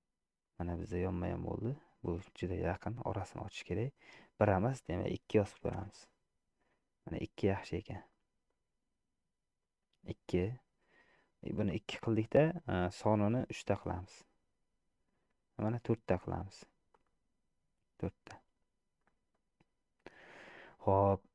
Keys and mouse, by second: 0.0 middle click, 2.8 middle click, 4.6-6.1 drag, 8.2-9.8 middle drag, 14.0 click, 15.5 click, 17.1-18.2 middle drag, 19.1 middle click.